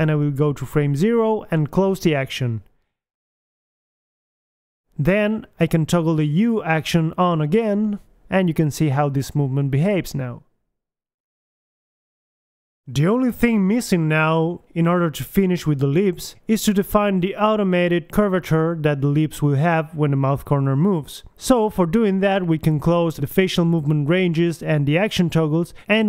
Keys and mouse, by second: 1.5-2.8 drag, 2.8 Right, 3.3 a, 3.5 a, 3.8 alt+g, 4.0 alt+r, 4.1 alt+s, 4.8 a, 7.7 right click, 7.9 g, 9.4 click, 9.4 g, 10.0-11.0 drag, 10.3 right click, 10.7 g, 11.5 click, 12.2 click, 12.3 g, 13.9 a, 14.2 alt+g, 14.2 a, 14.4 alt+r, 14.5 alt+s, 14.6 a, 14.6 KP_1, 24.9-26.0 middle drag.